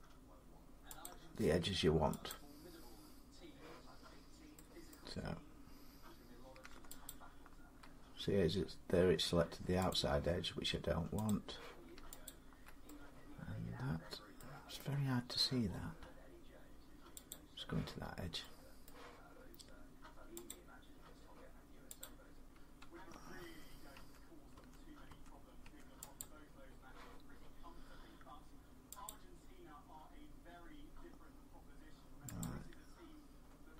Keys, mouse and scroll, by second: 0.9 click, 2.1 click, 4.7 middle click, 6.9 alt+click, 9.7 click, 11.1 click, 12.1 alt+click, 14.2 middle click, 14.6 scroll up 1, 14.6 scroll, 14.9 scroll up 3, 17.1 click, 17.9-18.2 scroll up 3, 18.7 middle click, 19.2 scroll up 1, 20.3 click, 21.8 click, 22.2 middle click, 23.2 Tab, 23.8 Tab, 24.4 Tab, 24.9 Tab, 25.5 Tab, 26.0 click, 28.9 click, 32.2 click.